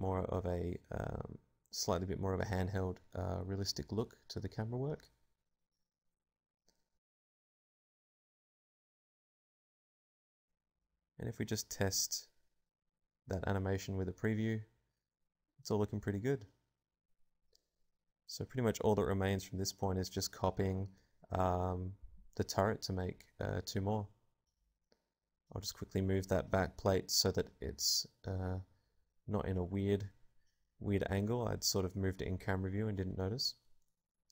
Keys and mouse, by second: 2.5 alt+a, 5.2 click, 9.2 click, 10.5 alt+a, 10.5-12.0 drag, 12.5 click, 15.4-17.7 drag, 19.9 alt+a, 23.3 middle click, 23.7 middle click, 23.9 right click, 24.2-27.5 typing, 24.5 click, 27.5-28.5 drag, 28.9 s, 29.0 click, 29.0 g, 29.7 r, 30.2 click, 31.3 a, 33.3 click, 33.4 z, 33.5 z, 33.7 KP_Decimal.